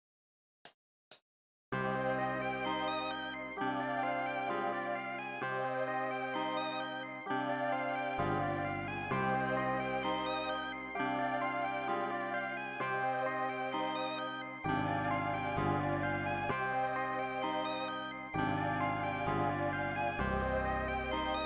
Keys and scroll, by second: 0.6 space, 1.2 space, 1.5 r, 1.7 space, 11.8 super+z, 12.8 super+z, 13.3 super+z.